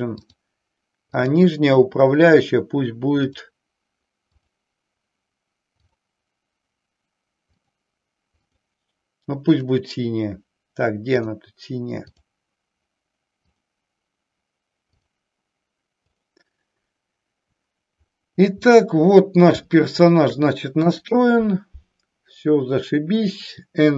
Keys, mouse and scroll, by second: 1.2 click, 4.4 click, 5.8 click, 8.6 click, 11.2 click, 13.4 click, 15.1 click, 15.9 click, 18.7 middle click, 19.7 shift+middle click, 20.7 KP_1.